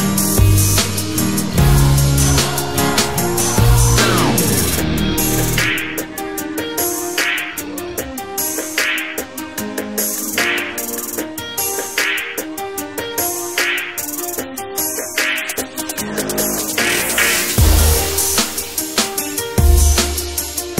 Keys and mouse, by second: 2.3-3.6 drag, 7.4-8.4 drag, 9.1-10.7 drag, 14.6-18.1 drag.